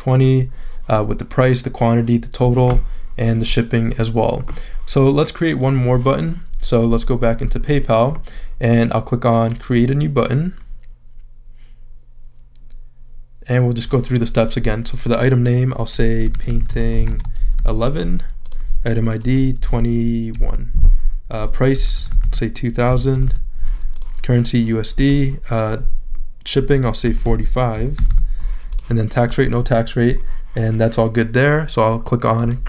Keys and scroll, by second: 16.1-17.9 typing, 19.6 2, 20.3 |, 21.5-23.6 typing, 26.8-28.2 typing.